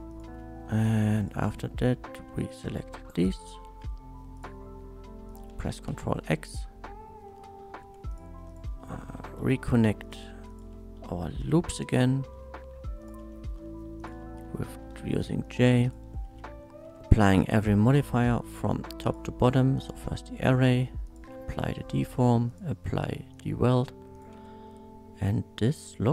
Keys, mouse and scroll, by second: 0.1 click, 0.4 space, 0.9 1, 1.2 click, 2.5 click, 2.9 shift+middle click, 3.7 shift+middle click, 4.4 shift+click, 5.3 shift+click, 5.9 ctrl+x, 7.3 middle click, 7.8 1, 8.1 click, 8.2 middle click, 8.5 click, 9.4 j, 10.0 click, 10.5 shift+click, 11.4 j, 11.7 middle click, 12.1 shift+middle click, 13.0 shift+click, 13.3 shift+middle click, 14.0 shift+click, 14.8 j, 15.4 click, 15.8 shift+click, 16.8 j, 17.7 shift+middle click, 19.0 shift+click, 19.8 shift+click, 21.1 click, 21.5 click, 22.5 click, 23.3 click, 24.1 click, 24.3 Tab, 24.7 middle click, 25.7 click, 26.0-26.1 middle drag.